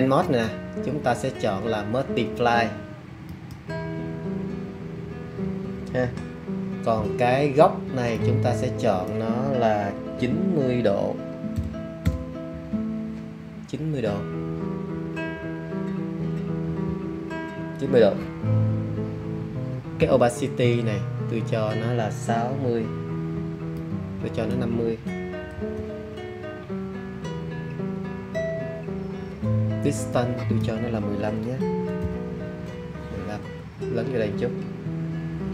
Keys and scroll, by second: 11.5 super+9, 12.0 0, 25.5 5, 31.6 1, 31.9 5.